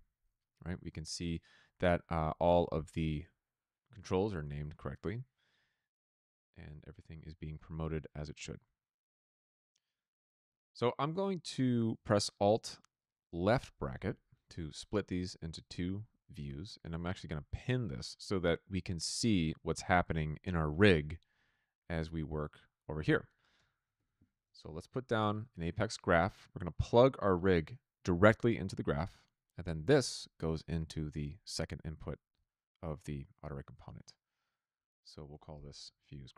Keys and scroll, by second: 13.7 alt+[, 23.5 Tab, 23.8-25.1 typing, 25.3 Return, 35.4-36.3 typing.